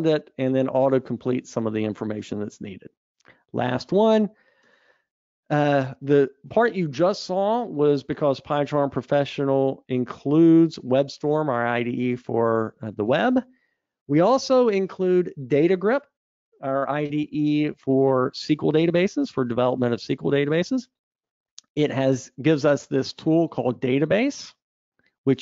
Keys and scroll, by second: 3.1 super+Up.